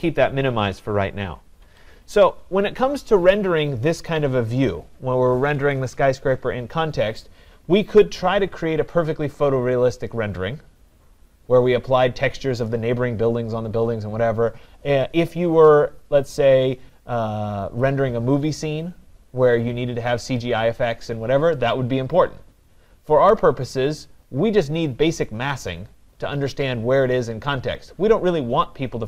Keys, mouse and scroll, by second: 0.1 click, 1.7 Escape.